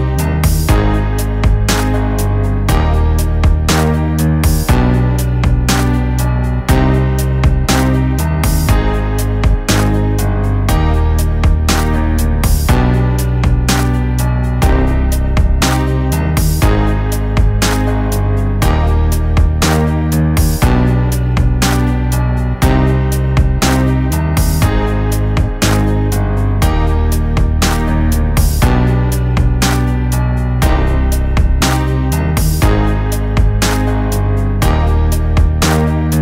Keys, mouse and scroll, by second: 0.1-2.4 drag, 5.7 click, 10.6 click, 10.7-12.5 drag, 21.2 click, 23.8-26.6 drag, 31.3 click, 35.1 click.